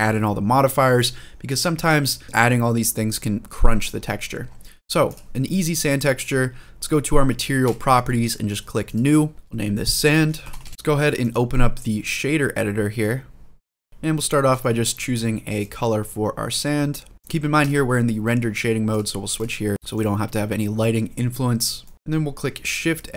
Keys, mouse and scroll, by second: 3.7-4.2 scroll up 3, 4.2-4.9 scroll down 1, 4.9 click, 4.9 scroll down 1, 7.4 click, 8.6 click, 9.3-10.7 drag, 9.3-10.4 scroll down 1, 13.8 click, 13.9 shift+middle click, 13.9 scroll up 7, 14.4 shift+middle click, 15.4-16.3 drag, 17.5 click, 18.7-19.2 drag, 19.7 middle click, 19.7-21.1 scroll down 2, 21.1 scroll up 1, 21.3 scroll down 1, 21.6 middle click, 21.9 scroll up 1, 22.9 shift+a.